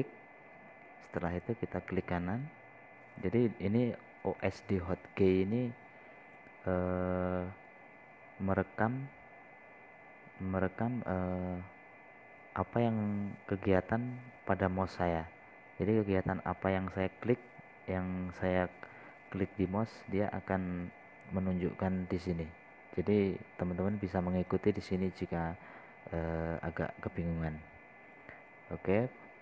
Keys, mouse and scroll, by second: 2.2 right click, 9.1 click.